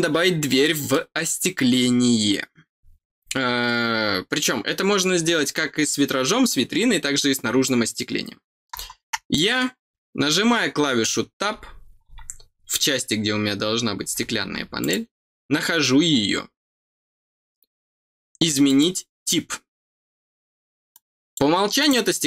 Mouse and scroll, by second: 0.6 middle click, 9.3 middle click, 9.9 scroll up 2, 14.7 click, 18.6 click, 20.9 click, 21.7 click.